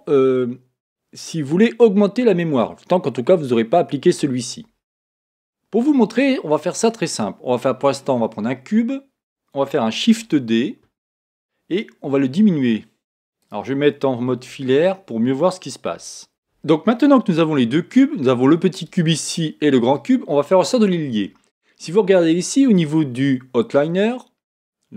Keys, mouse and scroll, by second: 6.2-8.0 middle drag, 8.0 scroll up 1, 8.3-10.2 middle drag, 10.2 shift+d, 13.5 click, 14.3 z, 15.9 s, 17.5-19.2 middle drag, 18.9-21.8 right drag, 23.3 right click.